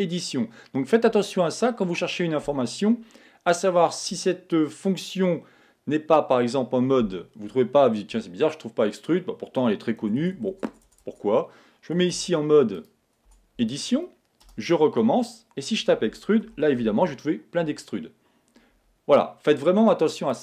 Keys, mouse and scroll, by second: 10.2 BackSpace, 13.3 Tab, 14.4 space.